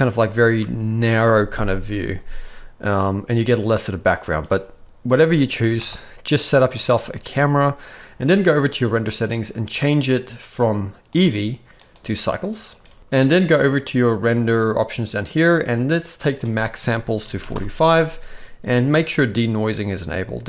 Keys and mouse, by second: 0.2 g, 5.7 g, 6.9 g, 9.0 click, 11.1-12.0 drag, 16.4-17.5 drag.